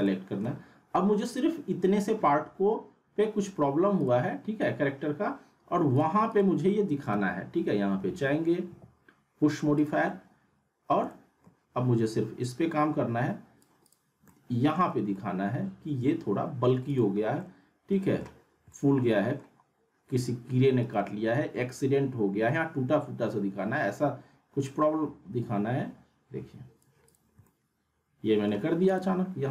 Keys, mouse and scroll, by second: 0.0-0.6 alt+middle drag, 1.3 click, 4.0 click, 7.1 p, 7.9 p, 8.7 p, 9.8 click, 11.1-11.7 alt+middle drag, 12.4-13.6 drag, 14.3-14.9 alt+middle drag, 16.8 click, 17.4-18.3 middle click, 18.5 scroll up 1, 18.7-19.6 alt+middle drag, 20.8 right click, 21.7-27.0 drag, 27.4-28.7 alt+middle drag, 28.9 click.